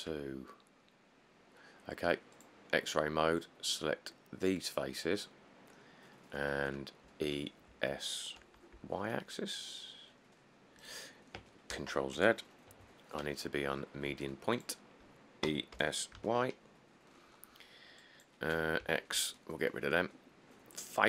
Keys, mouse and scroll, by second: 7.2 e, 7.9 s, 9.0 y, 11.9 ctrl+z, 13.0 ., 15.7-16.4 typing, 19.0 x.